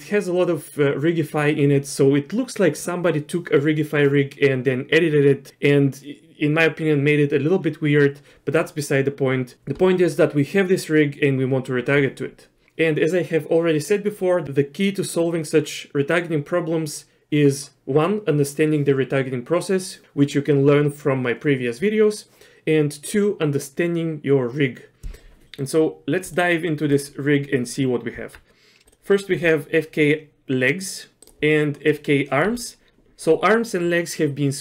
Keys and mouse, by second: 25.5 middle click, 28.2 Tab, 28.9 click, 28.9 ctrl+z, 29.3 r, 32.4 r.